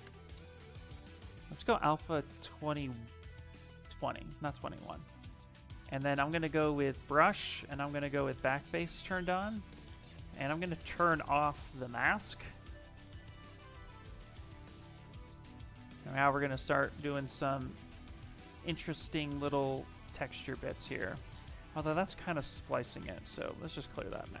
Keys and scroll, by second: 10.5 ctrl+h, 12.1 s, 14.5 s, 21.4 ctrl+z, 21.5 ctrl+z, 22.2 ctrl+z, 22.6 ctrl+z.